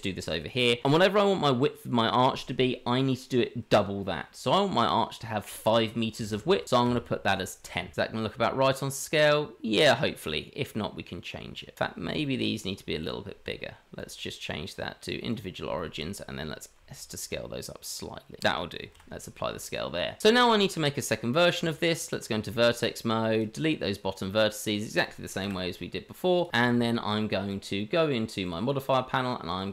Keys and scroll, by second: 16.3 s, 22.2 Tab, 25.6 Delete, 26.7 Tab.